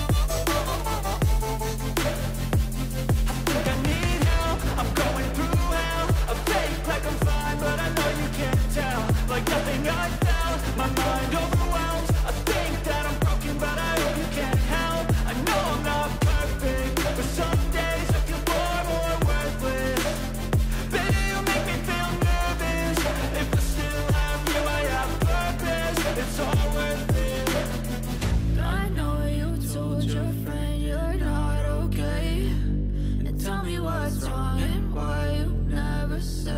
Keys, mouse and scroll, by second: 7.2 ctrl+z, 22.6 right click, 31.6 right click.